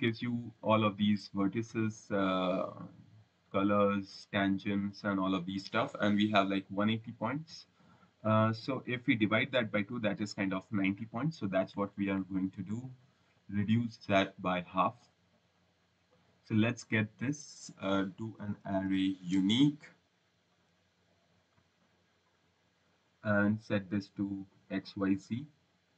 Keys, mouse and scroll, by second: 11.1 right click, 16.2 click, 18.1-20.0 typing, 20.9 click, 21.8 click, 24.2 scroll, 25.3 click.